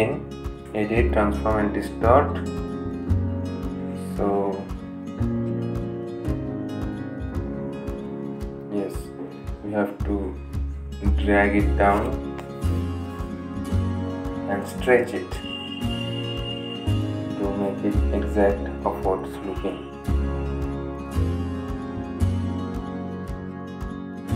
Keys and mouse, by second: 10.5 right click, 11.2-18.2 drag.